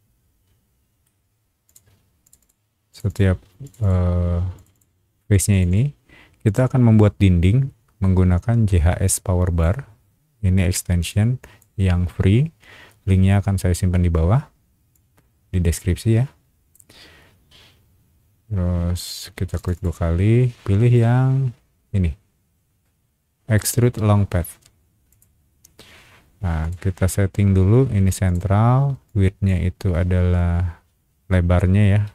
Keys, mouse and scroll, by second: 1.6 click, 2.2 click, 2.4 click, 2.9 click, 3.1 click, 3.6 click, 3.8 click, 4.5 click, 4.7 click, 5.3 click, 5.5 click, 5.7 click, 6.4 click, 9.0 click, 11.1 click, 14.9-16.7 drag, 19.5 click, 19.7 click, 25.1 click, 26.6 click, 28.2 click, 29.0 click.